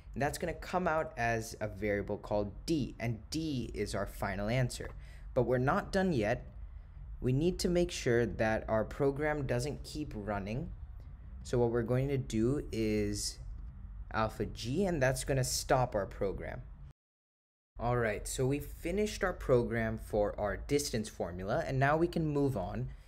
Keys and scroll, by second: 6.7 Return, 8.4 Right, 11.5 Left, 22.8 Return.